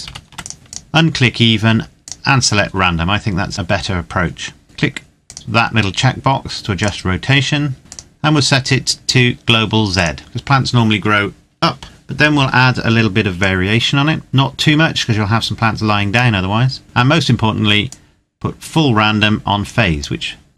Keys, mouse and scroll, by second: 0.1 click, 4.9 click, 13.1 click, 17.5 click.